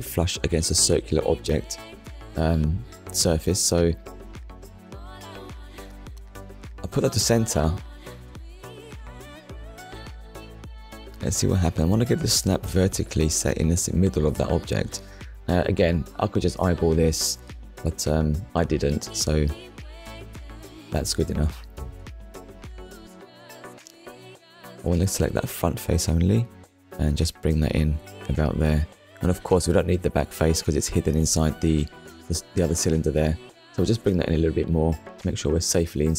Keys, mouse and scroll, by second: 3.5 click, 5.7 click, 7.4 click, 8.0 ctrl+click, 11.0 click, 12.3 click, 13.4 middle click, 14.9 KP_1, 16.5 Tab, 18.2 click, 19.3 click, 20.0 click, 22.0 click, 23.4 click, 24.8 click, 26.1 click, 27.2 click, 30.1 click, 31.1 click, 34.8 Tab.